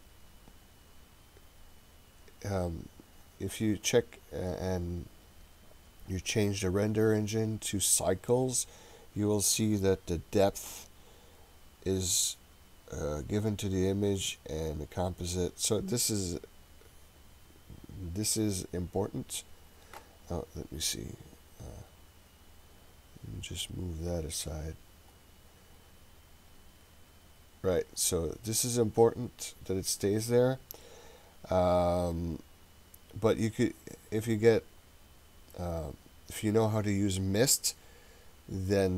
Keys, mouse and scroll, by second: 3.9-6.4 scroll up 3, 6.4-8.3 drag, 14.6-15.7 drag.